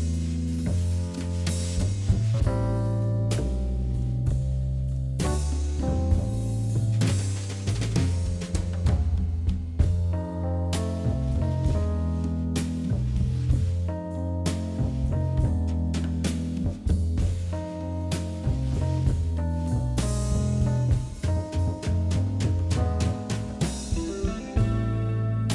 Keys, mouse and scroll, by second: 0.0 KP_3, 0.2 KP_1, 0.9 shift+z, 1.1 click, 2.1 shift+z, 2.3-3.3 middle drag, 3.3 shift+click, 4.1 KP_1, 5.0 e, 6.1 g, 8.0 KP_1, 8.8 KP_3, 9.6 g, 11.1 KP_1, 11.8 g, 14.4 s, 16.3 KP_3, 17.1 r, 18.2 KP_1, 19.1-19.4 scroll down 1, 19.4 shift+middle click, 20.4 shift+z, 20.8-21.3 scroll up 2, 21.3-22.3 scroll down 3, 21.8 shift+z, 22.3-23.5 middle drag, 23.5 ctrl+r, 24.7 scroll up 3, 25.0 middle click, 25.4 scroll down 2.